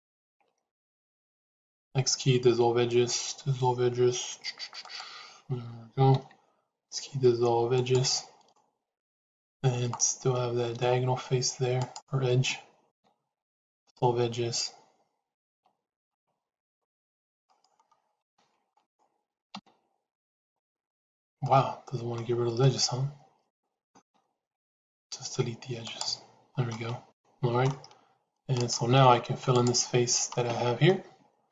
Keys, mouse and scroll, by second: 1.7 x, 6.0 x, 8.4-10.7 middle drag, 12.8 x, 15.4 c, 18.1 c, 19.4 x, 21.3 middle click, 22.5 middle click, 23.9 x, 26.7 middle click.